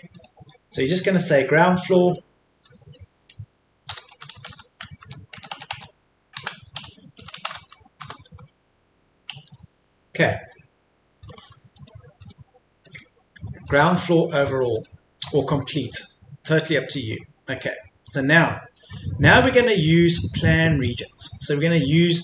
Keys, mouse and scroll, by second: 0.1 click, 3.9 typing, 5.0 BackSpace, 6.8 typing, 9.1-9.8 typing, 11.8-14.8 drag, 16.8 middle click, 17.7-19.6 scroll up 1, 19.6 click.